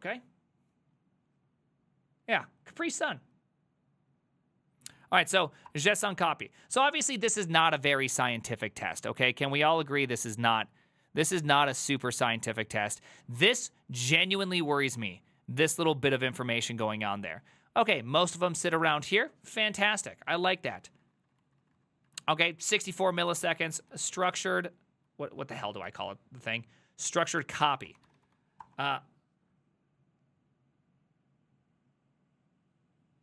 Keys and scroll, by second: 5.7 Return, 20.0 Up, 20.5 ctrl+Left, 20.9 Right, 21.1 Right, 21.2 Right, 21.4 Right, 21.5 Right, 21.7 Right, 21.8 Right, 22.1 Right, 23.1 ctrl+w, 23.4-29.0 typing.